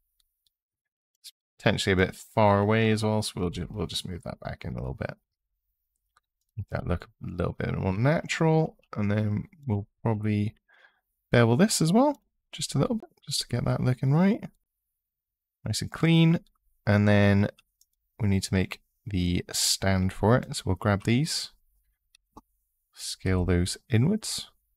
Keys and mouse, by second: 3.3 g, 4.1 x, 6.2 click, 6.5 click, 10.4 ctrl+b, 12.2 click, 13.0 click, 17.6 click, 21.9 s, 23.0 y.